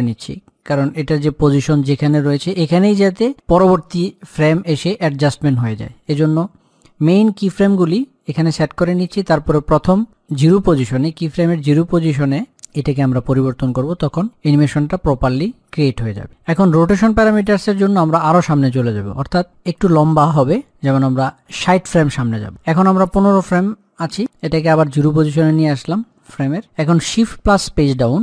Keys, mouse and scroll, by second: 24.4-26.8 drag.